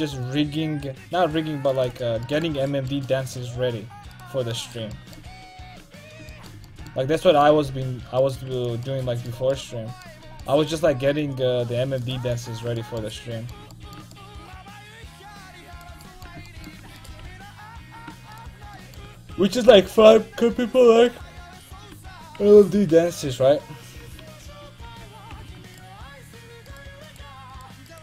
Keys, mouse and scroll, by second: 1.9 x, 4.2-5.5 right drag, 5.7 right click, 6.4 middle click, 8.3-9.6 right drag, 8.6 x, 9.6 middle click, 10.9 c, 12.0 click, 12.2 x, 15.8-17.3 right drag, 17.3 ctrl+x, 17.8 ctrl+z, 18.4 right click, 19.1 a, 19.3 a, 21.1-24.4 drag, 22.0 a, 24.1 a, 24.6 ., 24.9 l, 25.8-27.8 drag.